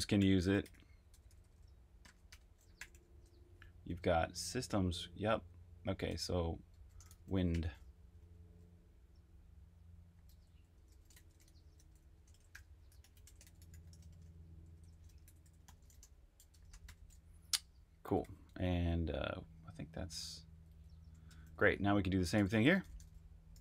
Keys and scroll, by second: 0.0-2.9 typing, 6.0-7.7 typing, 10.1-13.9 typing, 15.7-17.0 typing, 18.2-21.6 typing.